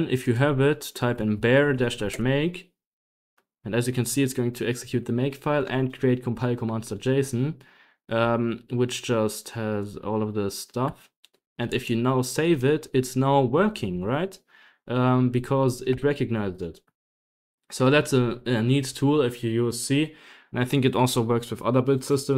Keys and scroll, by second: 0.5-2.4 typing, 10.8 Tab, 11.6-18.8 typing, 11.6 Return, 12.9 Up, 13.1 Up, 15.2 Escape, 17.3 ctrl+h.